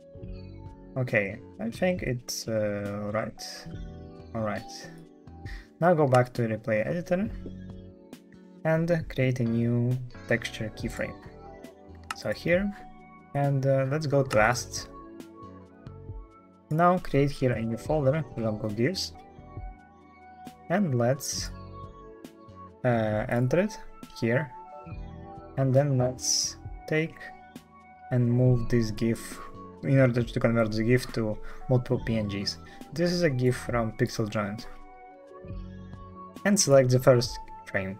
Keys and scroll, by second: 0.0-0.5 typing, 1.0 alt+f, 5.0 alt+f.